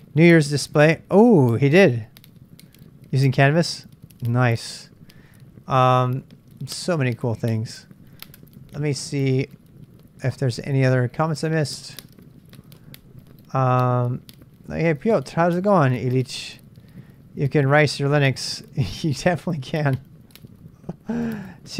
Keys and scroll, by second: 7.7-8.4 typing, 9.1 super+Tab, 9.3 super+Tab.